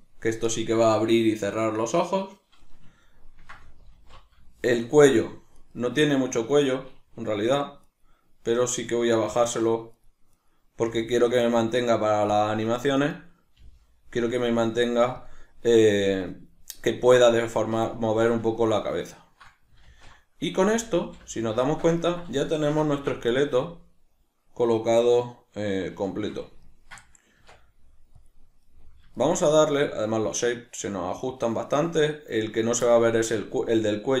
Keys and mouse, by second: 3.1 ctrl+middle click, 3.9 alt+q, 4.5-5.6 shift+middle drag, 5.6 right click, 7.9 right click, 8.8 right click, 9.3 right click, 9.6 right click, 10.0 right click, 10.3 right click, 10.8 g, 12.4 click, 13.0 right click, 13.6 g, 15.3 click, 18.0-34.2 shift+middle drag, 19.9 alt+q, 27.4 Tab.